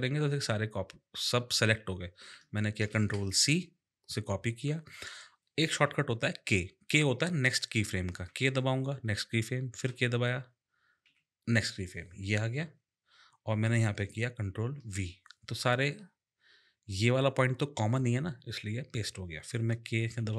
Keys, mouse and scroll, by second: 2.9 ctrl+c, 8.3 k, 9.7 k, 11.0 k, 14.9 ctrl+v, 20.0 k, 20.2 k.